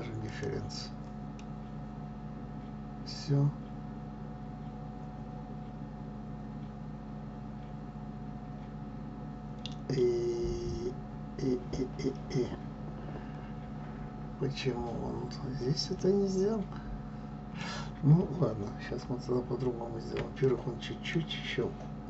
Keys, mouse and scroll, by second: 0.4-1.2 drag, 1.5-4.5 middle drag, 19.0 ctrl+z, 20.6-22.0 middle drag.